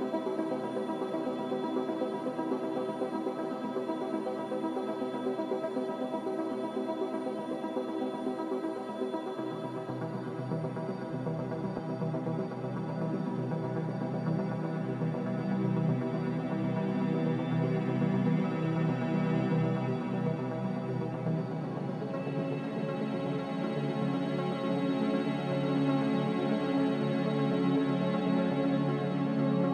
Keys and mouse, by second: 12.2 g, 13.6 ctrl+z, 14.5-15.2 shift+drag, 16.3-16.6 shift+drag, 17.8 click, 18.2 g, 20.0 click, 20.2 g, 22.5 click, 22.6 g, 25.6 ctrl+r.